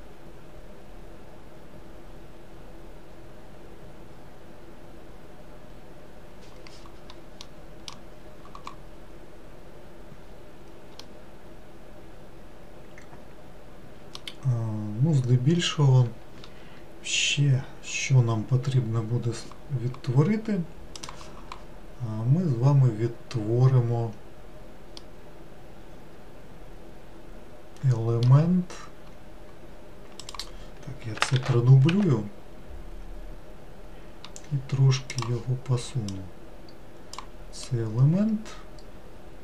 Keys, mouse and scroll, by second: 7.5-10.4 middle drag, 10.4-11.1 scroll down 2, 11.1-14.2 middle drag, 25.1-28.1 middle drag, 29.1-30.3 scroll up 1, 30.3 click, 31.5 shift+d, 35.2-36.3 drag, 37.7-39.4 middle drag.